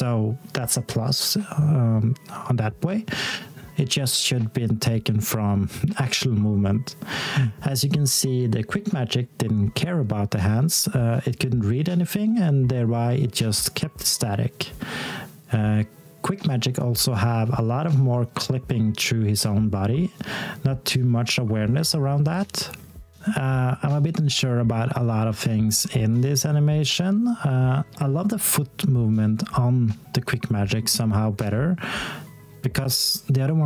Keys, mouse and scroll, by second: 2.2 x, 3.6-4.3 scroll down 1, 4.3 s, 5.0 click, 6.7 t, 7.7-8.3 scroll down 1, 8.8 x, 9.7 s, 10.1 click, 23.2 alt+click.